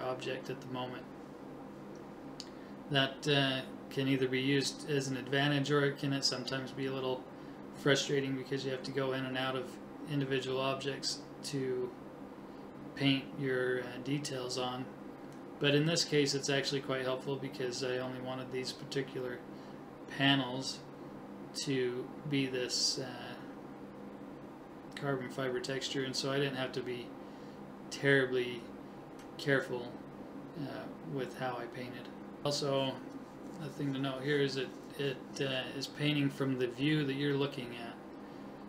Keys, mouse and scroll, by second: 0.1-2.4 middle drag, 2.4 KP_7, 2.6 middle click, 3.7 middle click, 6.0 middle click, 7.6 middle click, 7.7 KP_7, 8.4 click, 9.1 middle click, 9.5 click, 11.4 click, 12.4 click, 13.7 click, 15.5 right click, 16.8 right click, 17.6 right click, 18.9 right click, 20.6 click, 21.6 middle click, 22.6-23.9 middle drag, 23.7 KP_7, 24.2 right click, 24.5 click, 24.9 click, 24.9-27.8 right drag, 28.4 right click, 29.2 click, 30.2 KP_3, 30.9 middle click, 32.0 click, 33.3 right click, 35.5 KP_3, 35.9 middle click, 36.5 right click, 37.6 middle click, 38.3 right click.